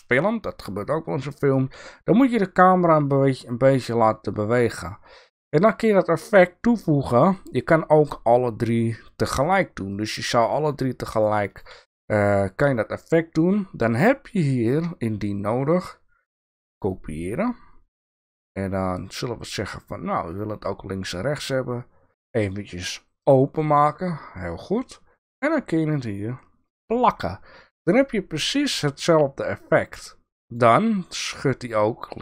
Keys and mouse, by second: 9.4 right click, 9.9 right click, 10.5 right click, 11.1 right click, 11.4 right click, 12.6 right click.